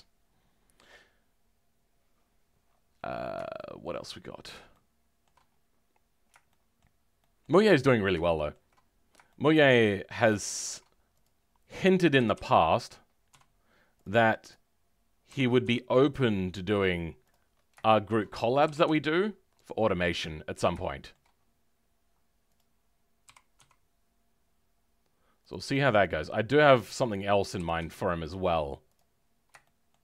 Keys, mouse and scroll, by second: 26.7 click, 27.6 g.